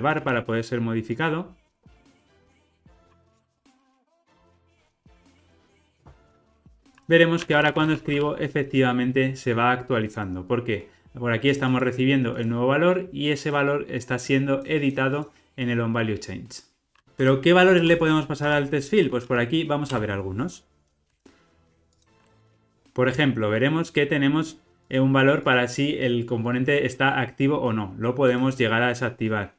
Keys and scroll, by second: 2.4 ctrl+r, 3.4 alt+Return, 17.0 alt+Return, 22.1 super+b.